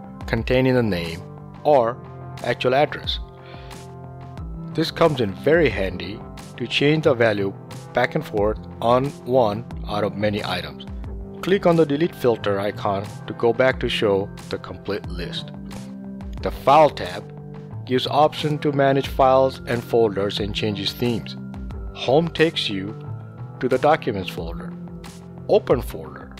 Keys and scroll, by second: 0.0-1.5 typing, 2.9 BackSpace, 3.3 2, 5.1 shift+Home, 5.3 Delete, 7.0 f, 7.5 l.